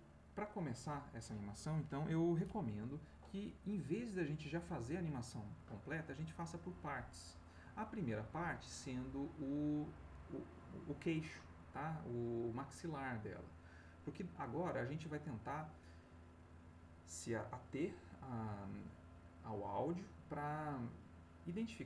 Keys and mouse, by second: 21.5 click.